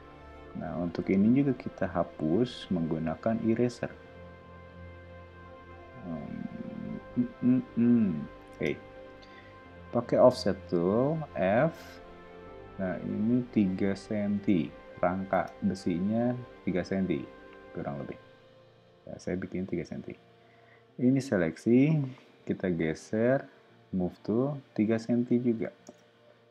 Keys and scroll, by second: 0.4 e, 8.5 space, 9.9 f, 13.8 3, 14.3 Return, 15.3 space, 22.4 m, 25.4 3, 25.8 Return.